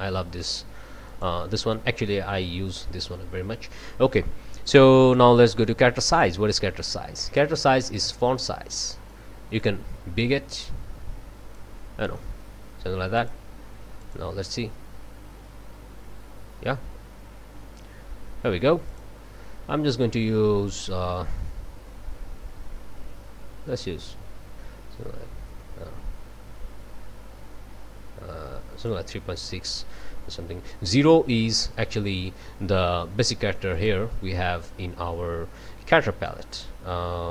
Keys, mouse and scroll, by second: 1.1 click, 5.1-6.4 drag, 8.4-9.8 drag, 9.1-9.8 right drag, 13.2 click, 14.0 click, 18.9 click, 20.8-29.1 drag, 31.0-31.5 drag, 33.7 click, 34.7 scroll down 1.